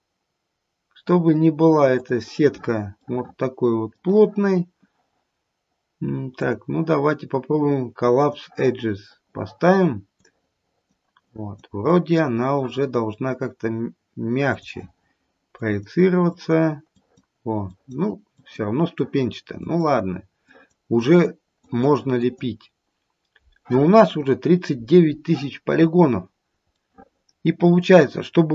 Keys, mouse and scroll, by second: 2.1 click, 3.0 middle click, 3.3 middle click, 10.2 click, 11.2 click, 11.8 click, 14.6 click, 15.5 click, 16.4 click, 16.9 click, 17.6 click, 18.3 click, 19.0 click, 19.6 click, 20.4 click, 20.9 click, 21.6 click, 22.1 click, 25.7-26.3 scroll down 1, 26.3-26.7 scroll down 3, 26.7 middle click.